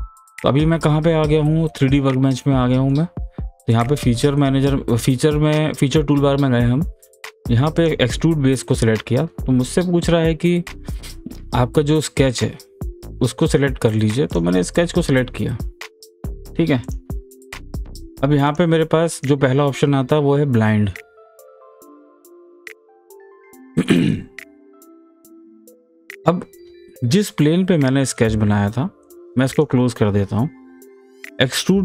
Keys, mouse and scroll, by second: 2.3-3.7 middle drag, 3.7 click, 7.8 click, 14.3 click, 16.8 click, 21.7 click, 21.7 scroll down 1, 22.4 click, 23.0 scroll down 1, 23.2 scroll up 1, 23.8-26.9 middle drag, 29.0 click, 31.2 click.